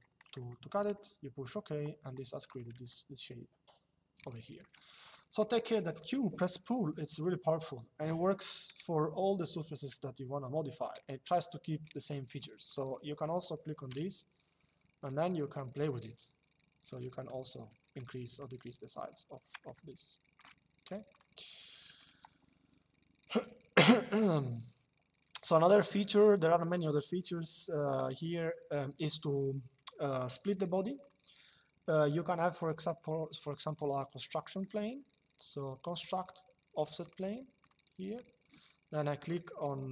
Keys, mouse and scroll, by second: 0.2 shift+middle click, 1.2 click, 2.6 shift+middle click, 4.7 click, 6.8 click, 12.3 click, 14.8 click, 18.2 Escape, 19.5 middle click, 20.5 click, 30.8 click, 32.3 click, 34.3 middle click, 36.7 click, 39.0 click.